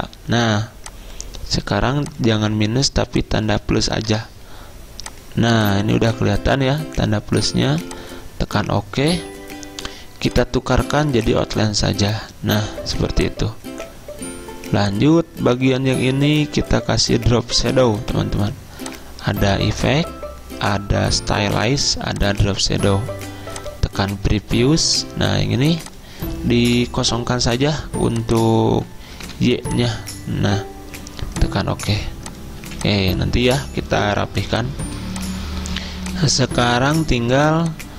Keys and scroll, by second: 4.1 BackSpace, 11.0 z, 13.0 v, 26.8 0, 29.3 0, 32.6 z.